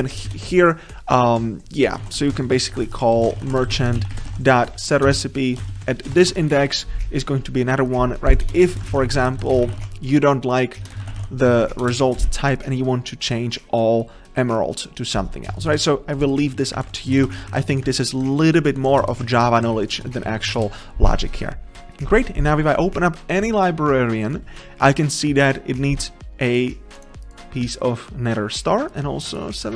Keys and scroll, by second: 3.2 ctrl+BackSpace, 5.9 Return, 10.8 Return.